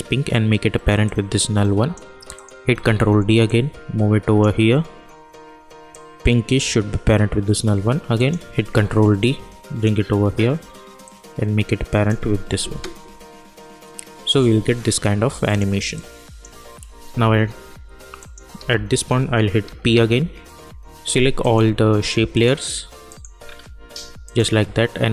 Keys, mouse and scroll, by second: 1.0-2.3 drag, 2.8 ctrl+d, 3.4-8.1 drag, 8.7 ctrl+d, 9.2-12.7 drag, 12.7 space, 15.4 click, 17.0 k, 18.2 click, 18.5 k, 19.6 p, 21.4 click, 22.3 ctrl+click, 23.4 scroll down 1, 24.2-25.1 ctrl+drag.